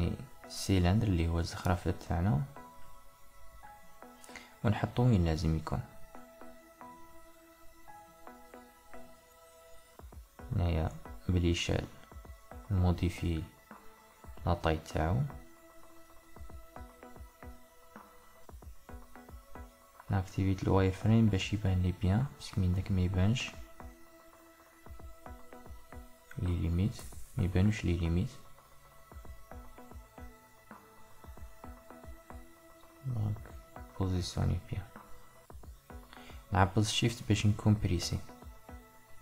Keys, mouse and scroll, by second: 0.4 Tab, 1.7 click, 2.6 click, 3.4-4.9 middle drag, 4.9 g, 6.8-9.5 middle drag, 9.5-11.1 drag, 11.1 KP_1, 12.1-13.1 ctrl+middle drag, 13.3-15.3 shift+middle drag, 15.3-18.4 drag, 19.6 Tab, 21.6 s, 29.5 Tab, 32.0 g.